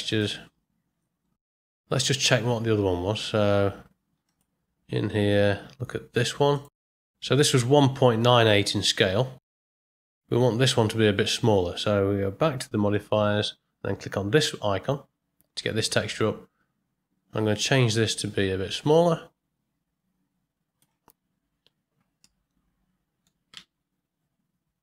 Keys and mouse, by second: 0.1 click, 12.9 click, 17.6-20.8 drag, 22.4 middle click, 23.5 space.